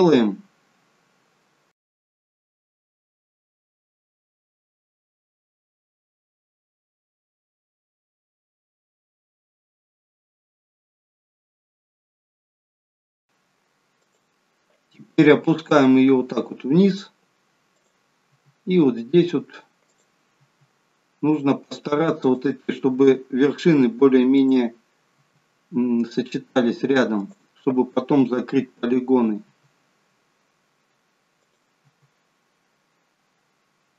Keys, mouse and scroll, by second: 1.8 e, 2.3 e, 3.2 e, 3.9 shift+middle click, 4.2-4.7 scroll up 3, 5.3-10.7 typing, 9.9 scroll down 1, 11.4 shift+middle click, 11.6-12.2 scroll up 2, 12.2 e, 12.8 e, 13.2 e, 15.1 e, 18.2 e, 20.3 e, 22.8 e, 25.0 e, 29.4 e, 32.1 e.